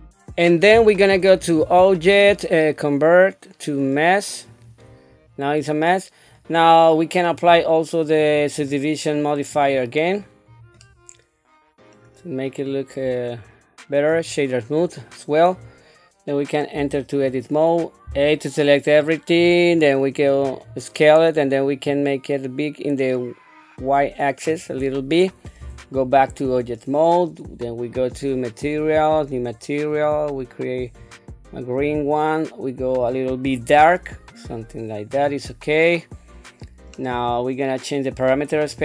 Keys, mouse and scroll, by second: 1.4-4.7 drag, 7.3 click, 8.1-9.9 drag, 10.8-11.9 middle drag, 12.6 scroll up 1, 13.3 right click, 15.6 scroll down 1, 16.7 Tab, 18.1 a, 20.2 click, 21.8-24.4 drag, 25.6 Tab, 27.9 click, 28.8 click, 29.9 click, 35.9-36.9 middle drag.